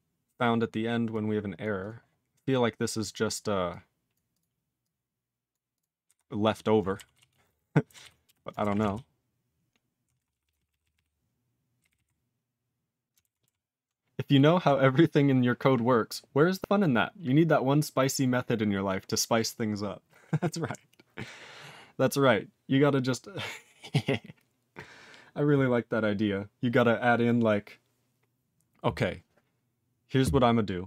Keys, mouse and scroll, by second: 6.0 q, 6.4 click, 6.5 click, 7.1 ctrl+s, 7.3 ctrl+a, 7.4 ctrl+space, 7.4 ctrl+e, 7.5 ctrl+g, 8.0 ctrl+s.